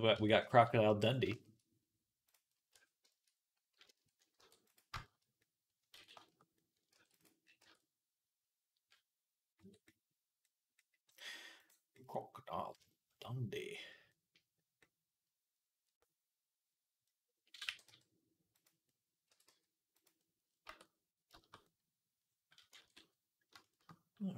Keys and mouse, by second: 0.0 Tab, 0.0 click, 0.2 click, 0.3-3.8 middle drag, 2.5 Tab, 4.2 ctrl+r, 5.0-7.7 middle drag, 5.8 ctrl+z, 6.8 ctrl+r, 7.4 Tab, 7.8-16.1 middle drag, 9.4 Tab, 11.5 click, 16.9 middle click, 17.2-21.3 middle drag, 17.5 g, 19.1 r, 20.5 Tab, 21.4 middle click, 21.8 middle click, 22.7 ctrl+s.